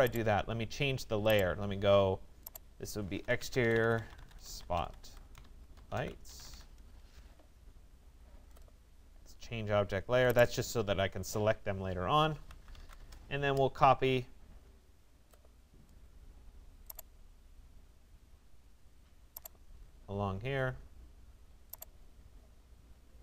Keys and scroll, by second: 5.0 shift+space.